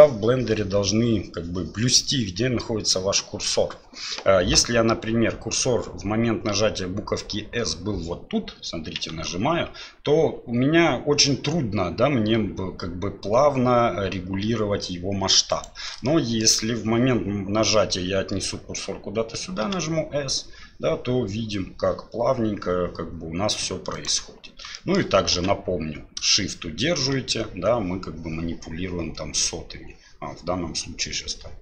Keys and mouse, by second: 9.0 s, 16.0-16.4 shift+drag, 19.6 s, 24.7 shift+click, 25.3 s.